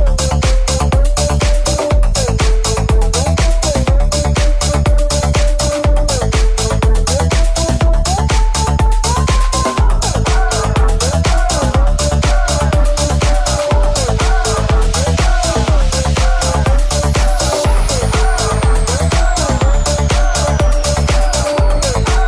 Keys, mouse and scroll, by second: 18.4 right click, 18.4-22.2 middle drag, 19.1 g, 20.8 alt+z.